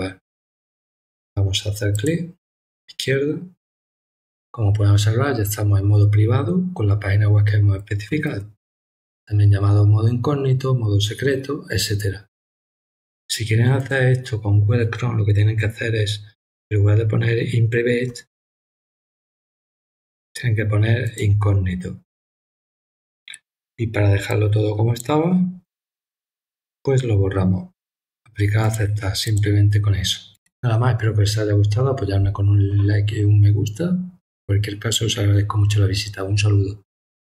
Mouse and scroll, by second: 1.9 click, 13.8 click, 21.0 click, 24.3 click, 28.6 click, 29.2 click.